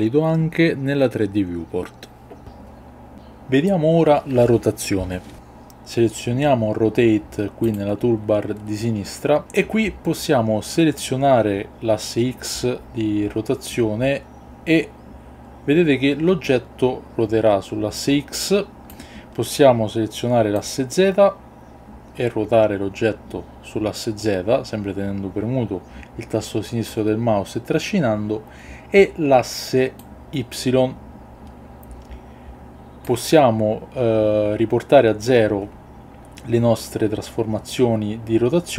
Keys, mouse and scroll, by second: 7.7 click, 11.0-18.9 drag, 20.5-26.9 drag, 29.9-33.1 drag.